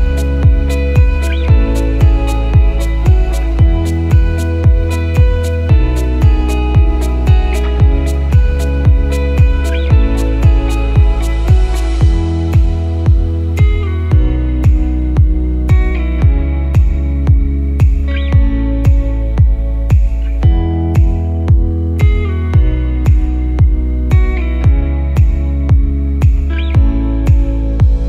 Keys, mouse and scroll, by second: 2.4 click, 3.3 KP_1, 4.6 e, 7.1 click, 9.5 e, 11.7 s, 14.7 e, 17.0 ctrl+z, 17.6 e, 20.5 s, 23.6 f, 24.4 click, 26.0 KP_1, 27.0 click, 27.3 click.